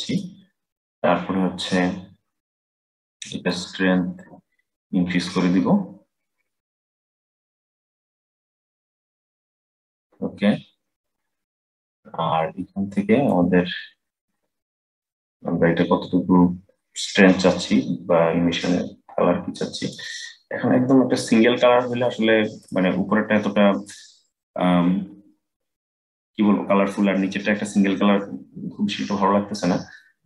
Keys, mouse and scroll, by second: 3.2-6.3 drag, 13.0-16.0 drag, 21.3-22.3 scroll down 3, 22.3 click, 25.1-28.1 scroll up 3.